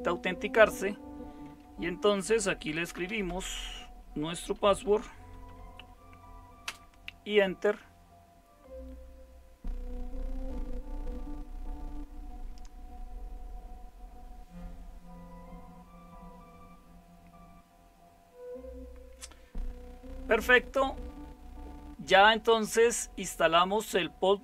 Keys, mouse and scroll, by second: 2.5-5.4 typing, 6.6 Return.